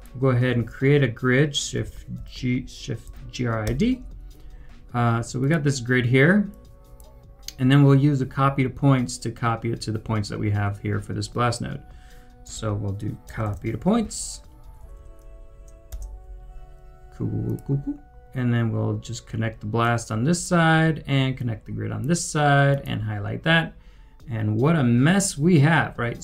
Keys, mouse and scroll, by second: 0.5 Tab, 1.5-3.6 typing, 12.4 Return, 12.5 Tab, 13.1-14.0 typing, 16.0 Return, 24.0 Return, 24.0 scroll down 1.